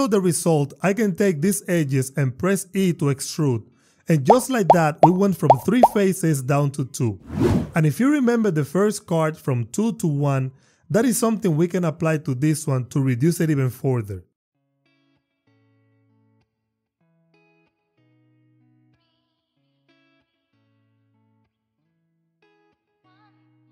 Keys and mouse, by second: 2.6 e, 3.1 y, 5.1 click, 6.2 click, 6.8 click, 7.5 alt+q, 10.4 alt+q, 15.4 ctrl+r, 15.6 click, 15.8 click, 16.5 Tab, 17.5 ctrl+x, 18.2 k, 18.7 click, 19.2 click, 19.7 Return, 20.0 Tab, 21.1 shift+click, 21.4-21.9 drag, 22.2 click, 22.8 Tab, 23.5 e.